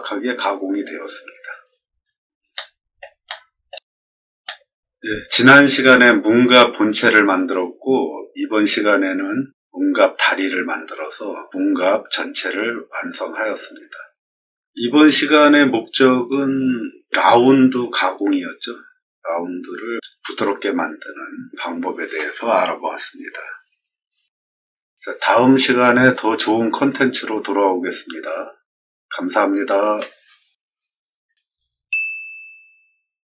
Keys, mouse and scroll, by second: 1.5 middle click, 1.6 middle click, 1.9 middle click, 2.4 middle click, 3.2 shift+middle click, 3.8 scroll down 6, 4.3 shift+middle click, 33.3 click.